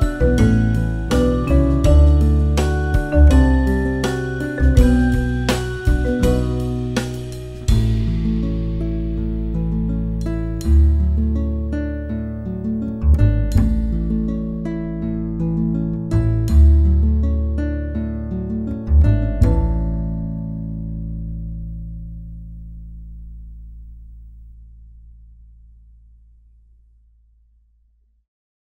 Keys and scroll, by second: 0.0-1.8 typing, 3.5 space, 3.9 space, 5.3 space, 6.1 space, 6.4 super+d, 6.5 space, 14.3 b.